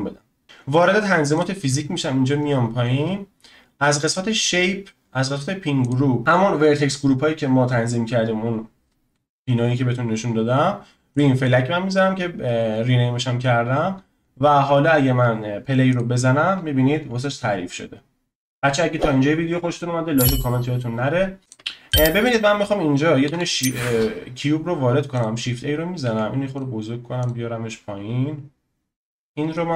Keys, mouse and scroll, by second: 1.3 click, 2.1-3.1 scroll down 18, 3.1 scroll up 1, 4.1 click, 4.4 scroll down 4, 5.8 click, 15.9 click, 21.4-21.9 drag, 23.2 shift+a, 26.0 s, 27.2 click, 28.9-29.5 middle drag, 29.5 click.